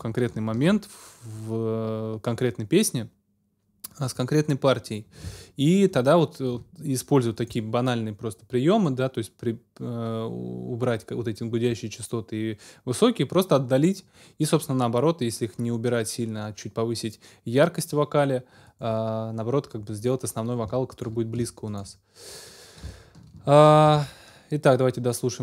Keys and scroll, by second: 0.6 ctrl+alt+super+s, 23.9 ctrl+alt+super+s.